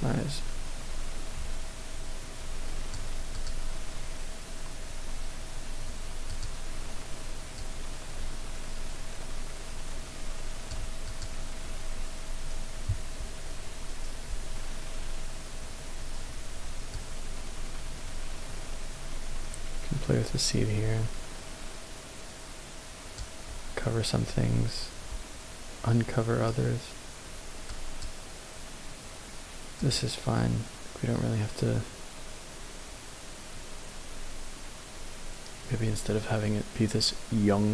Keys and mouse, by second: 3.4 click, 7.6-8.7 drag, 9.0-10.7 drag, 11.1 click, 16.9-23.2 drag, 27.7-28.0 drag, 29.9-37.7 drag.